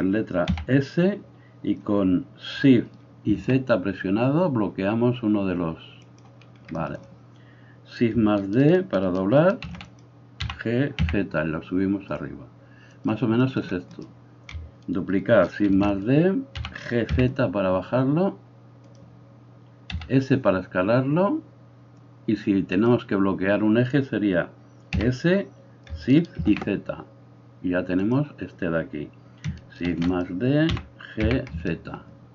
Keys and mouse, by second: 0.5 s, 9.7 shift+d, 10.5 g, 13.9 right click, 15.8 shift+d, 16.5 g, 19.9 s, 25.0 s, 29.8 shift+d, 30.8 g.